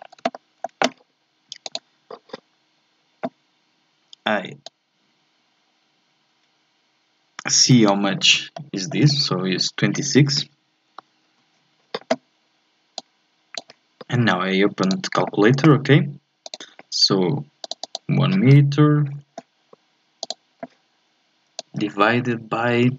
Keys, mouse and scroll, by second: 0.3-1.6 shift+middle drag, 1.6 click, 4.6 click, 8.5-11.1 shift+middle drag, 11.2 alt+F11, 13.0 click.